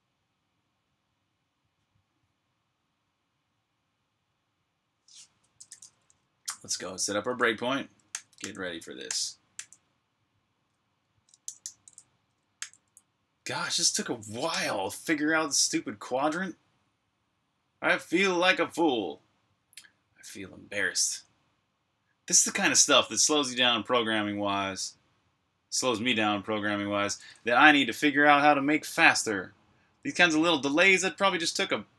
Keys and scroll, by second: 6.0 super+j, 11.2-12.1 typing, 12.5 super+j, 14.4 k.